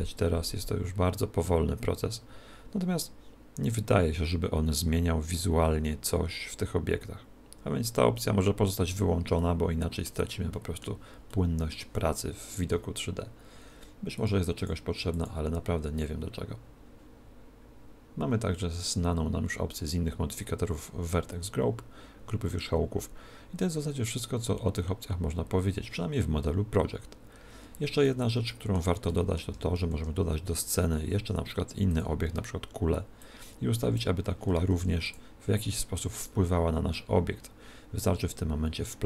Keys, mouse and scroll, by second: 9.4-13.3 middle drag, 14.2-17.0 drag, 28.1-30.9 middle drag, 29.9 shift+a, 33.2 click, 34.7 r, 35.3 r, 36.3 right click.